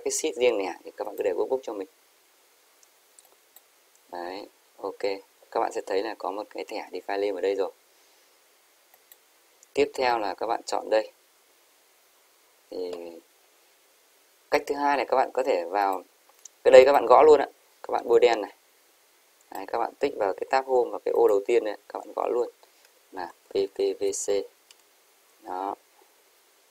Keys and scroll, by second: 23.5-24.8 typing.